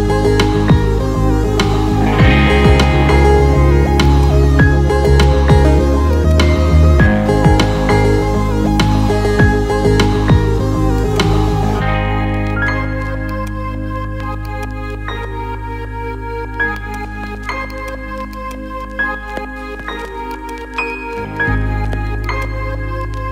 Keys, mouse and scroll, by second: 4.0 alt+middle click, 5.1 ctrl+alt+middle click, 6.0 alt+middle click, 11.0 click, 11.7 z, 13.4 alt+middle click, 14.5 ctrl+alt+middle click, 16.7 ctrl+alt+middle click, 17.7-18.9 alt+middle drag, 20.4-21.2 middle drag, 22.2 click.